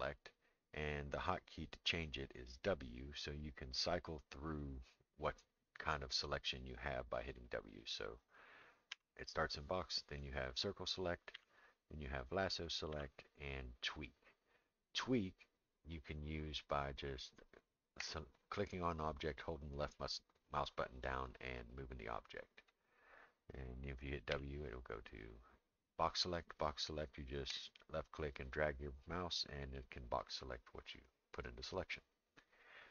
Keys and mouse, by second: 8.9 w, 11.3 w, 12.9 w, 18.0-22.7 drag, 24.3 w, 27.5-29.6 drag, 30.6-31.7 drag.